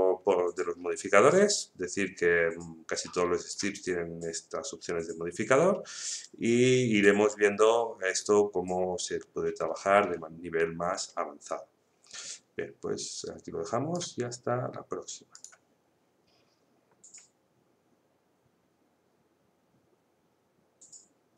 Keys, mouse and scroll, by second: 1.3-6.2 drag, 6.2-11.6 drag, 13.2-15.3 drag.